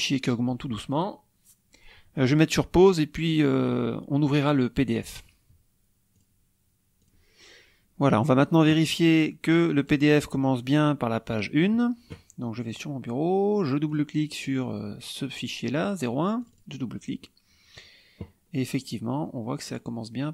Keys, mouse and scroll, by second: 6.1 click, 7.0 click, 9.7 click, 12.6 click, 13.8 click, 16.3 click, 18.4-18.8 scroll down 1, 19.0 scroll down 2.